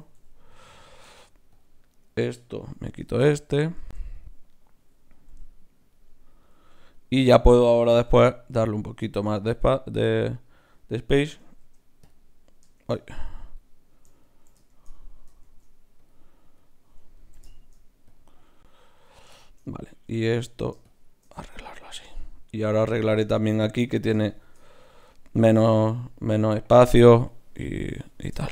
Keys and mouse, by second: 0.0 g, 0.7 middle click, 1.0 ctrl+Tab, 2.7 ctrl+x, 3.1 click, 3.8 ctrl+Tab, 4.5 click, 5.2 g, 8.0 g, 11.6 shift+q, 12.7 shift+q, 14.7 shift+q, 15.4 shift+q, 17.5 shift+q, 20.3 Tab, 20.8-22.4 drag, 21.4 Tab, 25.7-27.7 right drag.